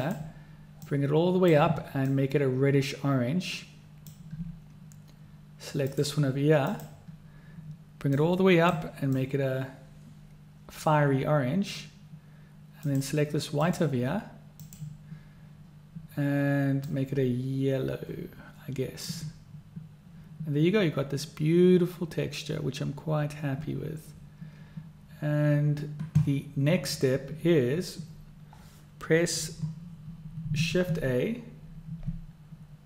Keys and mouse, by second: 0.1-0.4 drag, 6.1 click, 6.8 click, 13.0 click, 13.7 click, 30.8 shift+a.